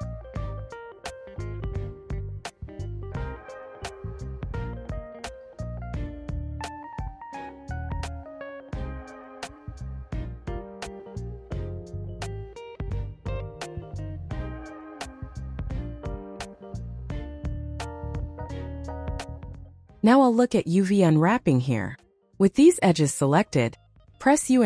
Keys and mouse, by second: 1.3 alt+shift+click, 5.9 u, 7.8 click, 8.3 middle click, 12.8 right click, 13.7 alt+shift+click, 14.9 ctrl+click, 16.1 middle click, 17.0 ctrl+click, 18.6 middle click, 24.2 u.